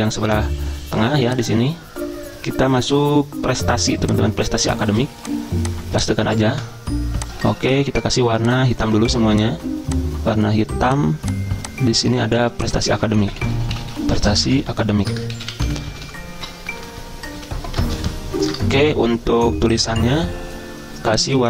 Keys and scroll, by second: 0.3 Delete, 4.9 ctrl+c, 6.6 ctrl+v, 7.5 ctrl+a, 13.0-18.6 typing, 14.6 ctrl+shift+Right, 14.9 ctrl+shift+Right, 17.7 ctrl+Right, 20.3-21.1 typing.